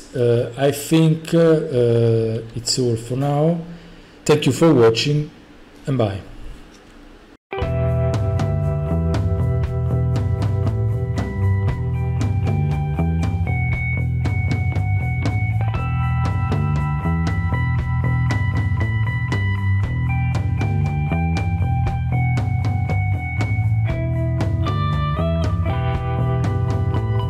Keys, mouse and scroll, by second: 0.1-3.1 typing, 2.7 right click, 3.6-7.2 right drag.